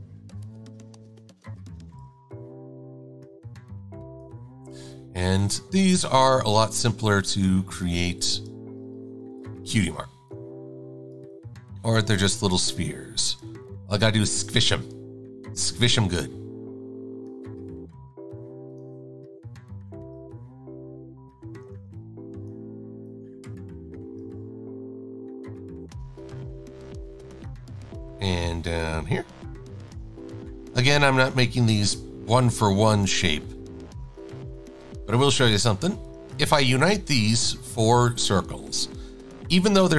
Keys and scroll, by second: 9.3 super+=, 21.8 e, 30.9 a.